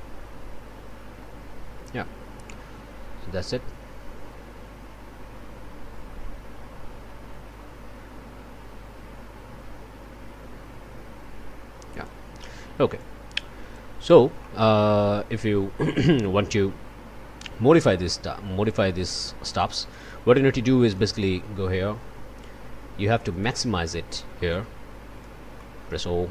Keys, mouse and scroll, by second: 11.9 click, 13.0 click, 14.4 click, 18.7 click, 19.6 click, 20.9 click, 23.3 click, 24.5 click, 25.6 click.